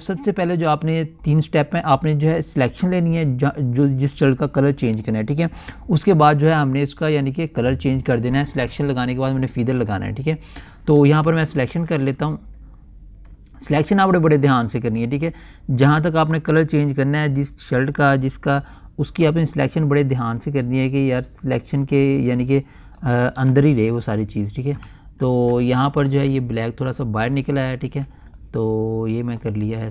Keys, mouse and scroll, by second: 10.3 click, 12.0-12.6 typing, 12.9-22.8 drag, 25.4 alt+scroll up 1, 26.3-26.7 scroll up 1, 27.7 click, 28.3-28.7 typing, 28.9-29.9 drag.